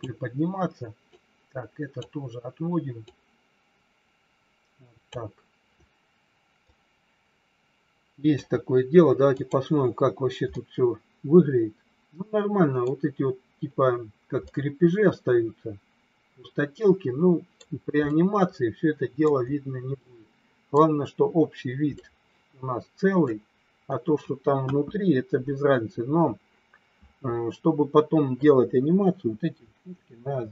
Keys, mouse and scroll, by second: 1.1 click, 3.1-5.1 drag, 6.7-8.3 middle drag, 9.3 click, 10.5 scroll up 1, 10.6-12.9 middle drag, 14.5-17.6 middle drag, 18.1 scroll up 1, 18.2-19.2 middle drag, 20.0 middle click, 22.0-23.2 middle drag, 24.6 KP_1.